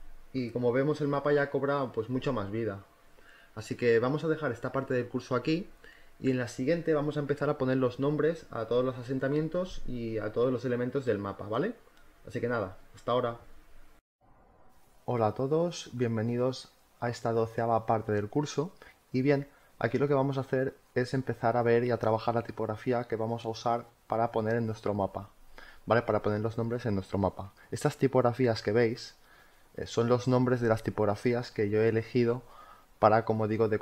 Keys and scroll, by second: 7.0 z, 9.5 space, 14.0 space, 17.8 space.